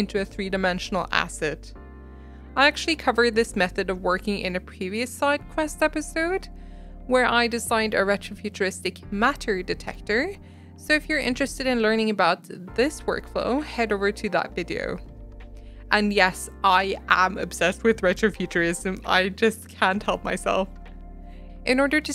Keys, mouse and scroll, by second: 1.4 shift+middle click, 13.2 shift+middle click, 17.0 click, 17.4 shift+click, 17.6 shift+middle click, 18.3-21.3 drag, 21.6 middle click.